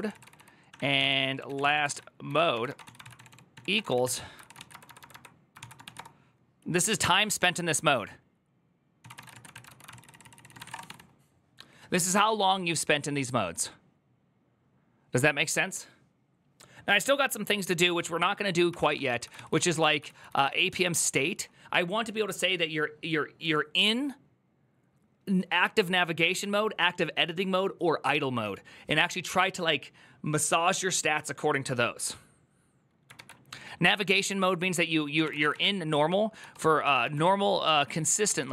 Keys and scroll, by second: 0.0-5.7 typing, 9.4 ctrl+y, 9.7 ctrl+c, 9.7 ctrl+c, 9.7-11.1 typing, 10.0 ctrl+c, 18.6 ctrl+d, 18.7 ctrl+d, 18.9 ctrl+d, 19.1-20.3 typing, 33.0 alt++, 34.8-38.5 typing.